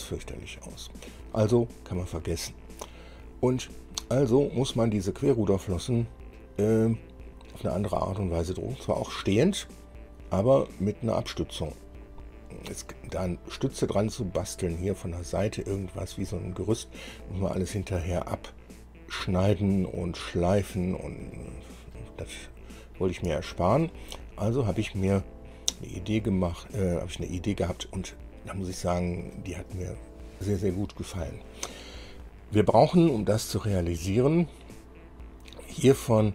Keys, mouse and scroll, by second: 0.3 scroll down 2, 0.8 middle click, 5.7-6.7 middle drag, 11.0-12.0 drag, 14.9 click, 20.5 click, 21.5 click, 22.6 click, 23.5 shift+middle click, 24.4 shift+middle click, 28.9-29.2 scroll down 2, 35.9 click.